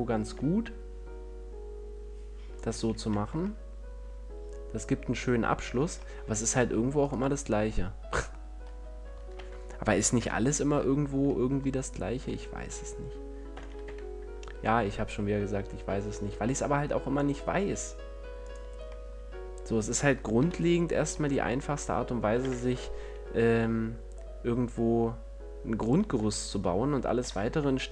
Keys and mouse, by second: 3.0 a, 3.4 Tab, 6.1 Tab, 9.6 ctrl+l, 10.5 KP_1, 13.8 shift+d, 18.8-20.6 drag, 20.6 middle click, 20.6 KP_1, 22.7 shift+d, 26.2-27.9 drag, 27.5 shift+d.